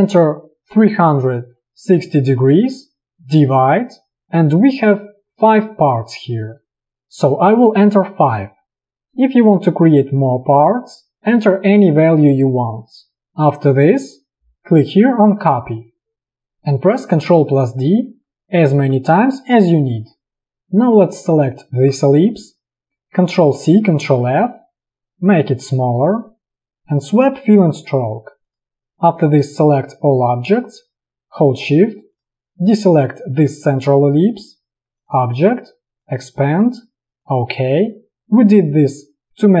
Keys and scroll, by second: 0.9 3, 1.3 6, 2.9 0, 3.6 /, 8.2 5, 17.7 ctrl+d, 23.5 ctrl+c, 24.1 ctrl+f.